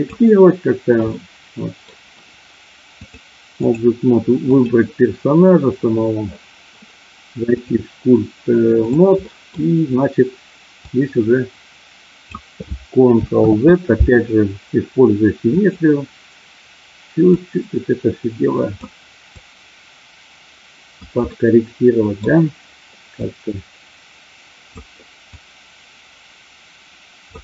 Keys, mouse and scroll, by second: 1.1 middle click, 3.0 click, 4.4 click, 7.5-9.0 drag, 9.1 middle click, 10.9-12.2 drag, 13.4 ctrl+z, 15.5 click, 17.4-18.7 drag, 19.4-20.9 drag, 21.4 middle click, 23.1-24.8 drag, 25.3-27.3 drag.